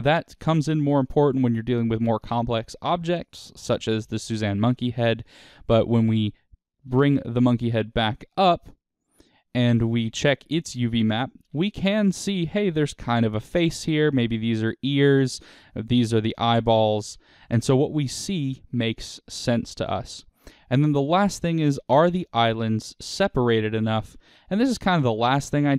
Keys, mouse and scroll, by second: 7.6 Tab, 8.6 click, 9.0 click, 9.9 click, 10.3 Tab, 11.5 a, 12.0-22.8 middle drag, 17.4-17.7 scroll up 2, 21.0-21.7 scroll up 2, 21.7-22.8 scroll up 1, 22.8 click, 23.7-25.7 shift+middle drag.